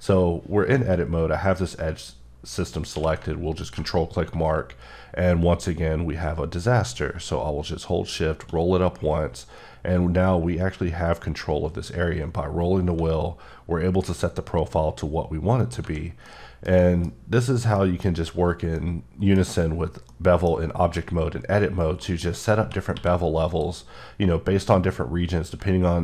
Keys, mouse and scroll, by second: 2.9 q, 3.0 q, 3.6 click, 8.1-8.6 shift+scroll up 2, 11.7-12.3 scroll up 4, 14.5 scroll up 2, 15.6 click, 16.0 scroll, 16.2 middle click, 16.8 double middle click, 17.1 scroll up 2, 17.7 middle click, 18.8 middle click, 19.5-19.9 scroll up 1, 20.1 middle click, 20.5 scroll down 1, 21.9 scroll down 2, 22.0 middle click, 22.9 q, 23.5 click, 25.9-26.0 ctrl+scroll down 1.